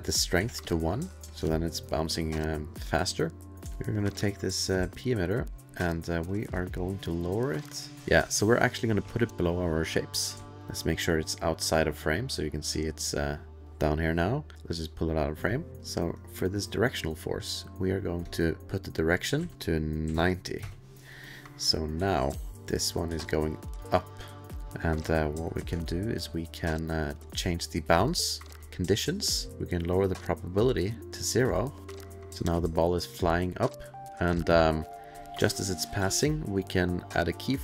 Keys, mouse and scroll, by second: 0.2 ctrl+a, 0.4 1, 0.7 click, 1.3 click, 1.3 space, 1.7-2.1 alt+click, 1.9 alt+click, 2.1 alt+middle click, 2.2-3.6 alt+scroll, 3.5 click, 3.5 2, 5.2 middle click, 5.5 click, 5.5 alt+middle click, 5.6 click, 6.4 click, 9.3 ctrl+alt+f, 9.3 click, 9.5 alt+middle click, 9.5 alt+click, 9.8 alt+click, 10.1 middle click, 10.6 alt+middle click, 10.6 click, 13.7 click, 14.5 click, 15.8 click, 19.1 click, 19.4 ctrl+a, 20.1 KP_9, 20.6 KP_Enter, 20.6 KP_0, 22.0 space, 22.5 click, 22.5 space, 23.1 space, 24.0 click, 24.6 click, 24.6 space, 25.8 alt+middle click, 27.2 click, 28.6 click, 29.8 click, 32.7 space, 33.9 space, 34.4 alt+middle click, 34.6 alt+scroll.